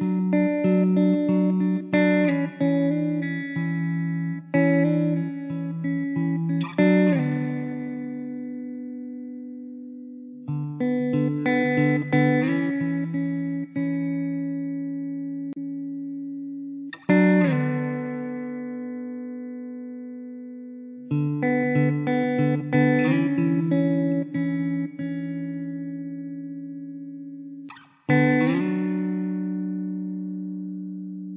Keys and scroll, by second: 0.9 Tab, 2.0 2, 3.6 2, 5.2 ctrl+b, 6.1 ctrl+z, 7.5 ctrl+b, 10.6 ctrl+r, 12.7 ctrl+r, 20.5 3, 27.4 e, 28.9 Tab, 29.5 Tab, 30.0 2.